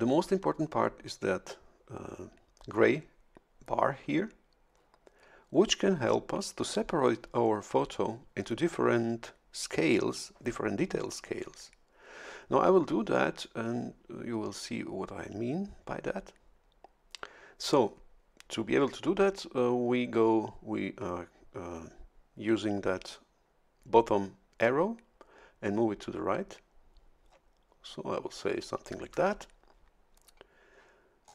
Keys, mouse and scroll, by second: 24.6-29.0 drag, 31.2-31.3 scroll up 1.